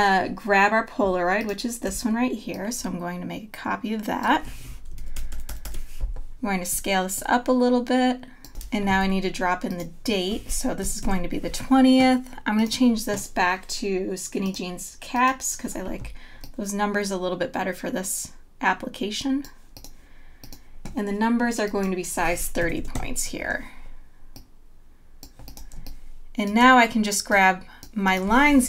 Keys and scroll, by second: 5.3 super+=, 9.0 t, 10.8 KP_2, 11.5 KP_0, 22.6 KP_3, 22.9 Return, 25.8 space.